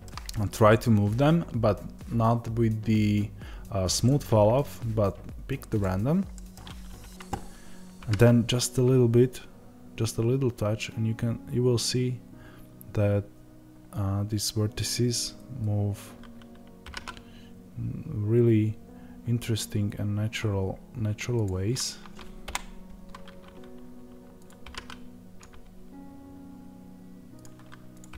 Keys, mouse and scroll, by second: 5.7 click, 6.2 middle click, 6.6-7.4 scroll down 2, 7.4-7.9 scroll up 2, 7.9 g, 15.3-16.8 scroll up 2, 16.8 g, 22.3 KP_0, 24.3 click.